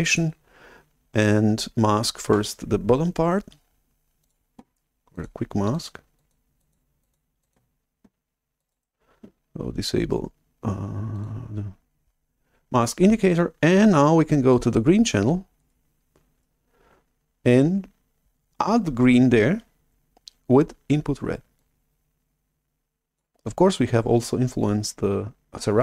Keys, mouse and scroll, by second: 0.0 click, 4.2 click, 5.0 drag, 5.6 drag, 6.1 click, 6.5 drag, 6.9 click, 7.3 drag, 8.5 click, 8.6 right click, 11.1-13.6 drag, 14.6 click, 15.5-16.3 scroll up 2, 16.3-18.8 scroll down 2, 21.5-23.1 drag.